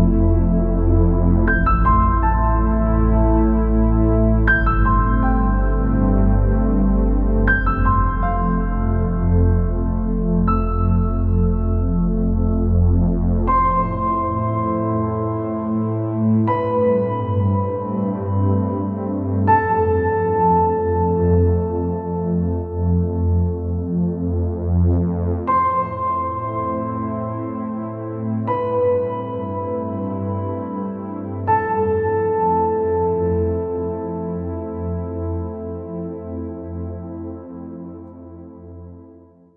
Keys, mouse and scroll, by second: 5.2 shift+z, 15.9 shift+z, 16.7-21.1 middle drag, 19.8 shift+z, 23.1 shift+z, 24.1-25.7 drag, 24.6 Tab, 25.9 click, 27.3 ctrl+r, 31.9 shift+z, 35.8 shift+z, 37.3 ctrl+r.